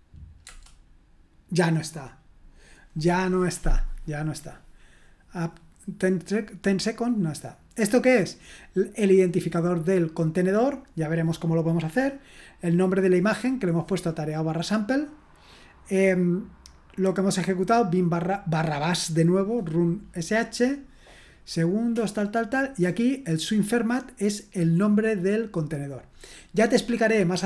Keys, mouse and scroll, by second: 0.4 Return, 8.0 click, 8.3 click, 13.3-21.3 drag, 14.6 right click, 23.2-27.4 drag.